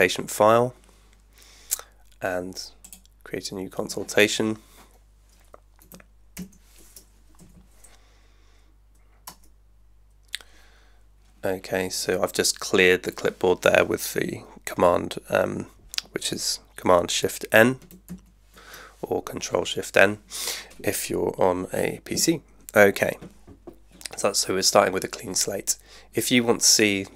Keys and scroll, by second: 6.3 shift+super+n, 7.4 Right, 9.3 Return, 18.1 shift+super+n.